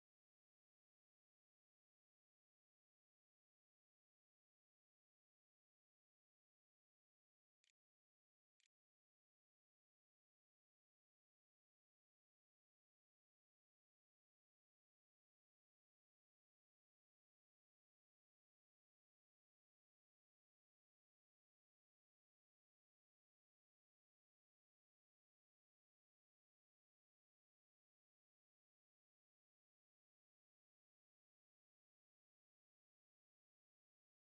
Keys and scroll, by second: 8.0 ctrl+a, 8.4 ctrl+s, 8.9 e.